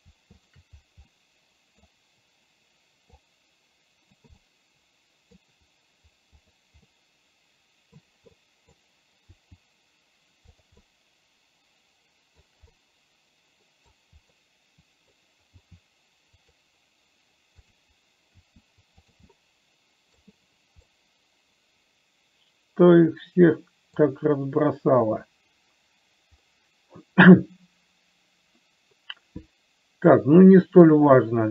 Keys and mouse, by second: 0.8 shift+click, 1.5 middle click, 3.6-4.6 drag, 4.7-5.7 middle drag, 7.2-8.3 middle drag, 8.7 middle click, 9.7 r, 11.2-12.7 middle drag, 13.1-14.2 middle drag, 14.6 middle click, 15.8 r, 18.0 click, 18.7 r, 19.7 middle click, 21.2-24.5 middle drag, 26.8-31.2 middle drag.